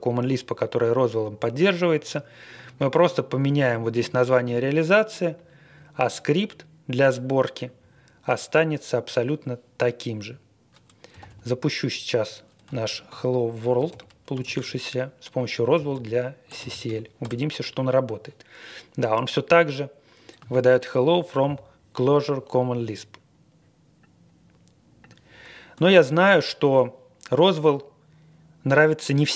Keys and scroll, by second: 11.1 typing, 12.4-17.2 typing, 26.0 ctrl+l.